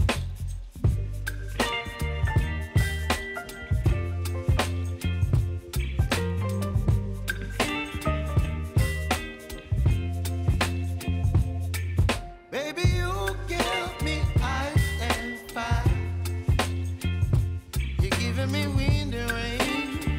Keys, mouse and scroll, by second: 0.0 click, 0.5 space, 3.1 space, 3.3-7.4 drag, 7.4 space, 9.4-9.8 typing, 10.4 click, 13.8 click.